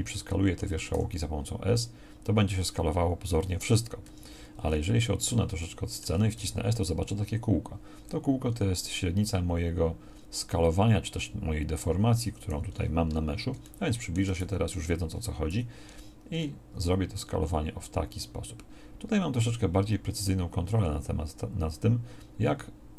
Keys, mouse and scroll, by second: 0.9 s, 4.7 middle click, 6.4 s, 14.4 z.